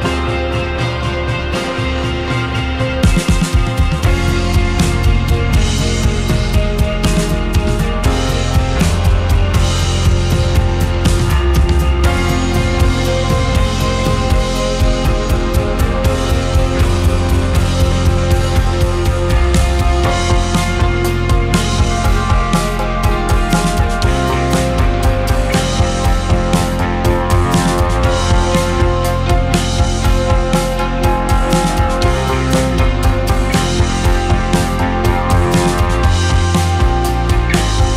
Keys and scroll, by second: 2.4 space, 7.2 ctrl+h, 7.4 ctrl+space, 13.3 2, 21.8 shift+space, 23.1 shift+space, 28.0 space, 33.2 ctrl+c, 33.3 ctrl+v.